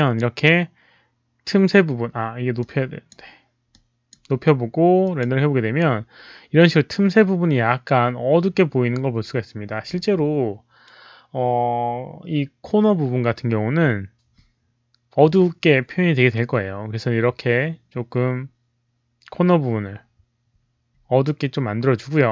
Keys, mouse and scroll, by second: 2.5 click, 3.6 click, 5.0 click, 8.2 click, 13.3 click.